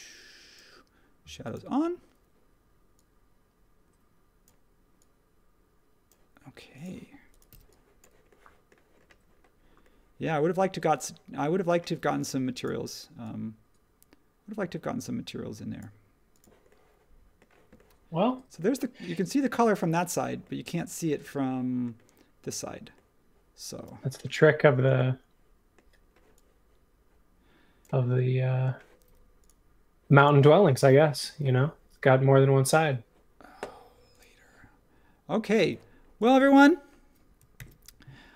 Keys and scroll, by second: 7.5 h.